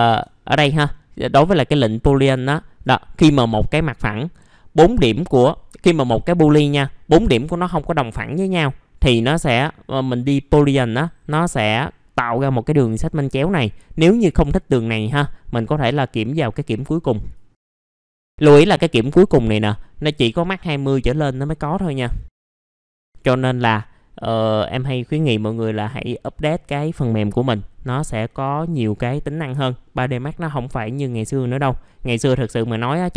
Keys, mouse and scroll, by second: 0.5 middle click, 0.7-2.3 scroll down 1, 2.4 alt+middle click, 3.4-4.3 scroll up 1, 17.8 scroll down 1, 18.1 middle click.